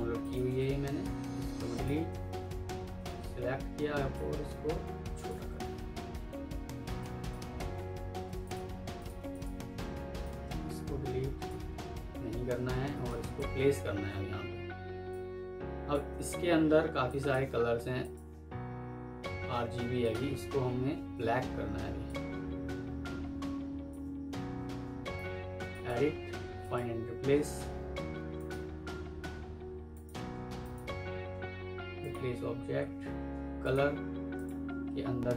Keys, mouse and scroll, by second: 0.1 ctrl+click, 1.1 Delete, 5.0 shift+click, 5.5 typing, 6.5 F2, 7.3 Escape, 9.2 double click.